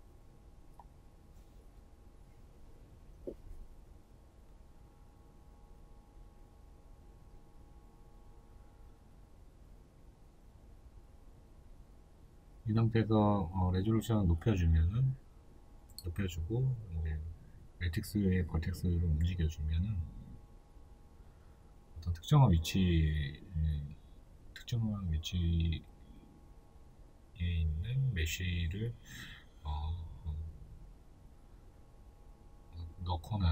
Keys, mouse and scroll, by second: 6.4 right click, 6.7-9.1 shift+middle drag, 7.3 Tab, 9.1-13.9 drag, 13.5 Return, 13.9-15.3 middle drag, 14.8 1, 15.3 right click, 16.4 right click, 16.9 1, 18.6 right click, 18.9-22.5 middle drag, 19.3-19.6 scroll up 2, 19.9 scroll down 1, 20.8 g, 22.9 right click, 23.1 g, 24.1 right click, 24.5 scroll down 1, 24.7-26.5 middle drag, 26.5 right click, 27.0-33.1 middle drag, 27.6 g, 33.1 right click.